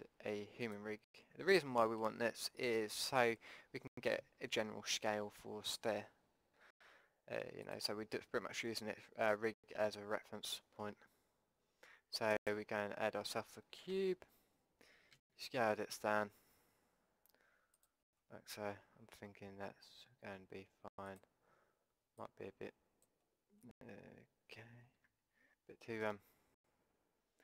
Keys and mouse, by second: 3.2 KP_1, 7.7-9.6 drag, 9.6-12.4 middle drag, 12.4-14.4 drag, 14.0 Tab, 15.2 s, 18.5-21.1 middle drag, 21.1-24.2 drag, 24.2 middle click, 25.1 KP_5.